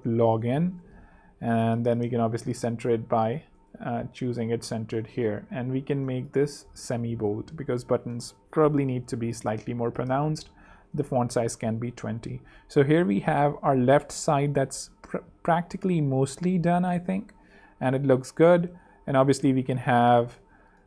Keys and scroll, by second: 0.0-0.9 typing, 1.0 alt+h, 4.9 ⟲, 7.0 super+3, 8.5 super+2, 9.2 shift+super+., 10.3 shift+super+,, 10.8 shift+super+3, 11.7 super+3, 14.8 z, 16.3 z, 19.1 super+2, 20.3-20.8 typing.